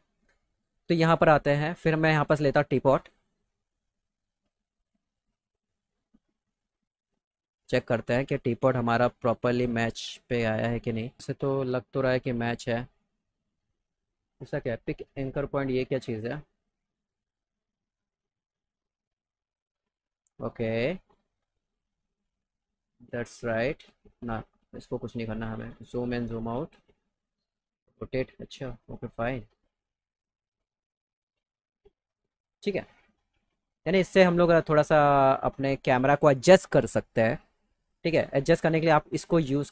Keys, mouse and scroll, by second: 0.9 click, 2.2 click, 3.4 click, 6.0 click, 7.7 right click, 8.6 click, 9.8 click, 10.9 click, 15.4 click, 16.9 click, 19.2-21.5 drag, 22.1-23.6 drag, 23.8 ctrl+z, 24.9-26.9 ctrl+drag, 27.4 click, 27.7 click, 28.9 click, 29.5 click, 30.7 click, 31.2 click, 34.9-37.1 drag, 38.5-39.7 drag.